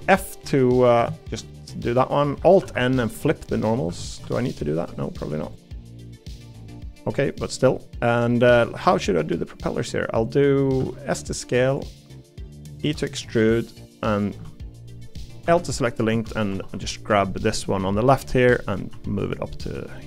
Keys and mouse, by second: 0.5 middle click, 1.1 shift+middle click, 1.5 middle click, 2.6 alt+n, 3.5 middle click, 3.9 Tab, 4.2 Tab, 5.2 middle click, 5.6 click, 6.1 3, 7.1 middle click, 7.7 middle click, 8.3 middle click, 9.7 middle click, 10.8 s, 12.8 e, 14.4 a, 15.4 l, 16.1 a, 16.5 g, 18.9 g.